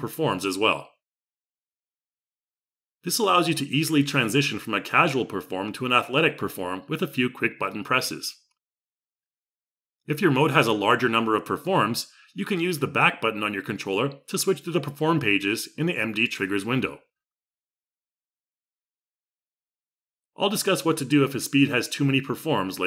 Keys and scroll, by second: 2.8 x.